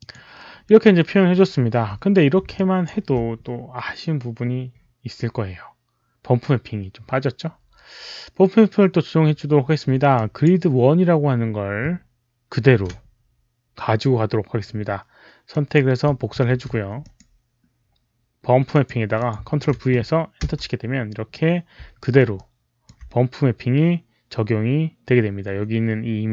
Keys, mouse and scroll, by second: 1.4 alt+right click, 2.4 alt+click, 8.8 alt+click, 10.0 alt+click, 12.5 ctrl+c, 12.5 alt+click, 15.4 click, 16.3 ctrl+c, 16.9 click, 18.6 click, 19.1 click, 19.4 ctrl+v, 20.3 Return, 20.3 ctrl+v, 20.3 ctrl+c, 20.3 click, 22.0 Return, 22.0 ctrl+v, 22.0 ctrl+c, 22.0 alt+middle click, 22.0 click, 22.3 alt+click, 22.9 alt+click, 22.9 alt+middle click.